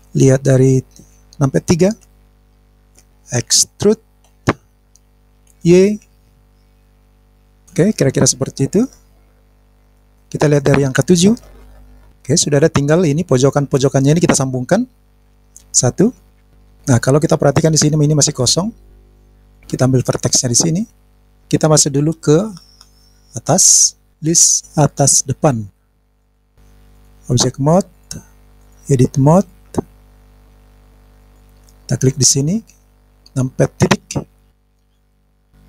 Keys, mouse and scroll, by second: 0.0 click, 2.0 KP_3, 7.7 click, 8.9 scroll down 2, 9.3 middle click, 11.6 KP_7, 11.8-12.6 scroll down 1, 16.0 KP_1, 16.4 scroll down 1, 16.4 middle click, 17.8 click, 18.5 click, 19.0 click, 21.2 click, 22.5 click, 24.1-25.8 scroll down 1, 25.8 click, 26.4 click, 26.9-28.0 drag, 28.6 click, 31.2 click, 33.9 KP_Decimal, 34.6 scroll down 1, 34.7-35.3 scroll down 10, 35.2 scroll up 1, 35.3 scroll down 1, 35.4-35.6 scroll down 2.